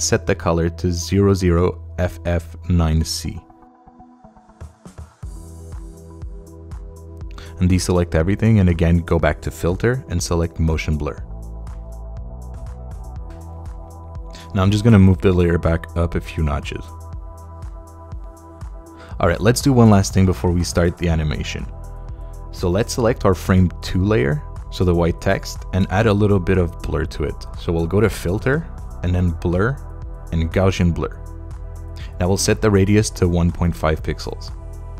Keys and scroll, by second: 2.0 0, 3.1-4.5 typing, 5.0 Return, 6.4 Return, 7.5 super+d, 15.5 Up, 33.5-34.9 typing.